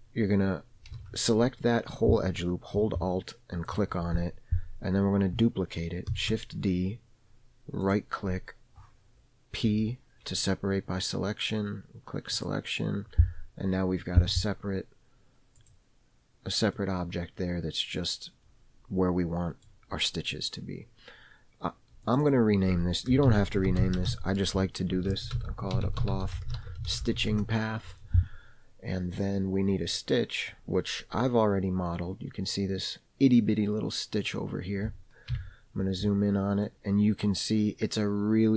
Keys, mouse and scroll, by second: 1.4 alt+a, 4.1 alt+click, 6.5 shift+d, 10.0 p, 14.6 Tab, 16.0 click, 17.1-20.1 middle drag, 22.4 click, 22.6-28.5 drag, 29.5 scroll up 1, 29.5-30.3 middle drag, 30.5-31.4 scroll down 1, 34.6 click, 35.7 KP_Decimal, 37.0-38.5 middle drag.